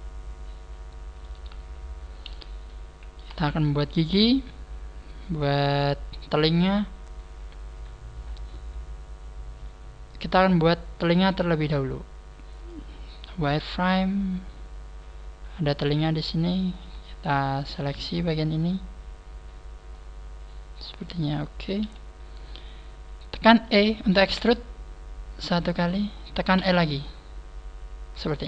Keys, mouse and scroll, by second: 1.3 Tab, 2.2 KP_1, 3.4 shift+middle click, 3.5 shift+middle click, 13.2 click, 13.6 click, 17.1 shift+right click, 18.6 shift+right click, 19.9 middle click, 21.7 KP_1, 25.5 e, 25.5 click, 25.8 click, 25.8 scroll up 3, 26.5 e, 28.2 click.